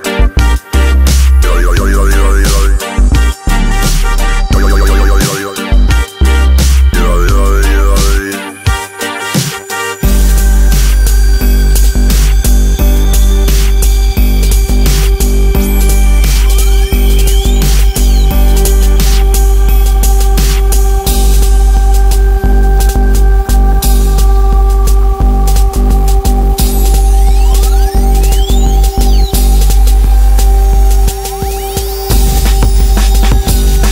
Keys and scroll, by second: 1.5 space, 7.2 Escape, 10.6 Escape, 28.5 Return, 33.6 space.